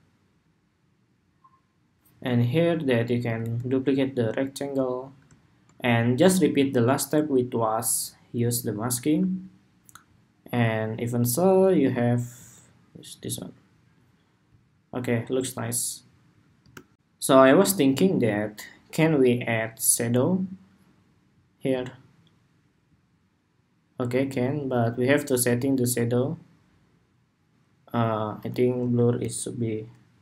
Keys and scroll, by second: 3.1 super+d, 16.6 shift+super+2.